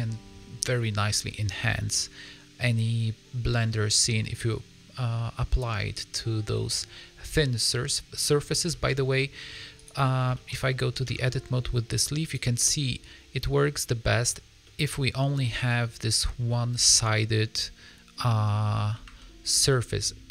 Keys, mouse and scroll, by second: 0.6 middle click, 1.6 middle click, 5.6 middle click, 6.4 middle click, 6.8 scroll up 2, 7.3 middle click, 8.6 shift+middle click, 8.8 scroll up 3, 9.1 middle click, 9.7 click, 10.3 shift+middle click, 11.3 Tab, 11.5 scroll up 1, 12.2 click, 12.5 middle click, 14.7 middle click, 15.2 scroll up 2, 15.3 middle click, 16.8 g, 19.6 middle click.